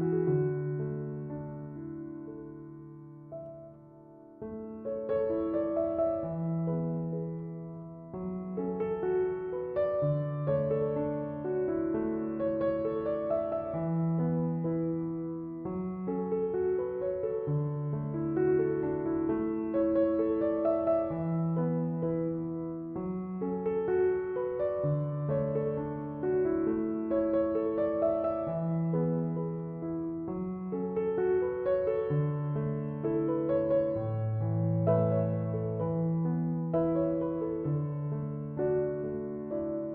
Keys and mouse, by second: 8.6-16.9 drag, 17.5-23.3 drag, 26.6-39.9 drag.